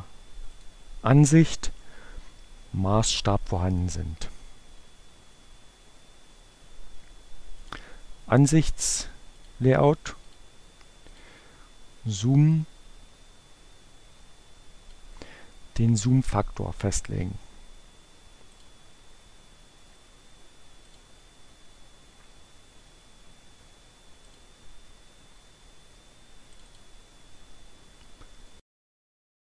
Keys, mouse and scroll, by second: 0.5 click, 2.9 click, 6.6-8.1 drag, 9.0 click, 10.2 click, 11.0 click, 12.1-14.7 drag, 16.6 right click, 18.4 click, 19.7 right click, 20.8 click, 21.9-23.3 right drag, 24.2 click, 25.6-27.0 drag, 28.4-29.4 drag.